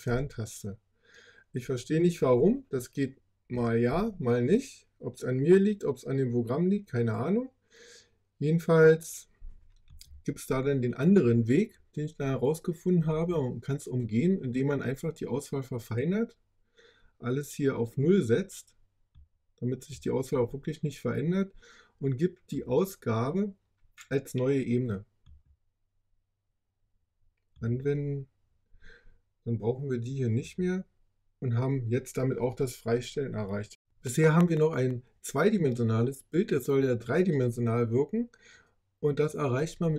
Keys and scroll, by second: 0.0 BackSpace, 3.8 super+z.